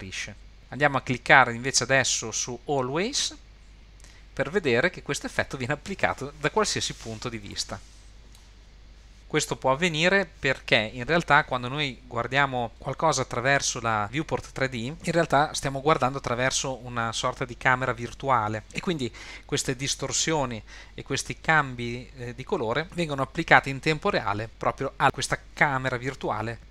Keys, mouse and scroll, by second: 0.6-1.1 scroll up 1, 1.5-4.2 drag, 7.5-8.3 middle drag, 8.6-9.2 middle drag.